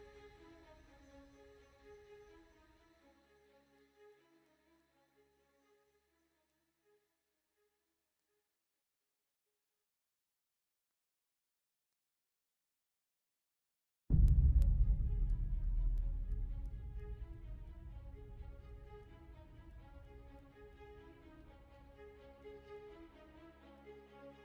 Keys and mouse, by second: 1.0-2.0 middle drag, 2.8 shift+click, 3.3 middle click, 5.8 ctrl+x, 7.1 middle click, 8.4 x, 11.5 click, 12.8 x, 14.5 middle click, 15.8 click, 17.1 x, 18.4 middle click, 20.5 middle click, 22.6 click.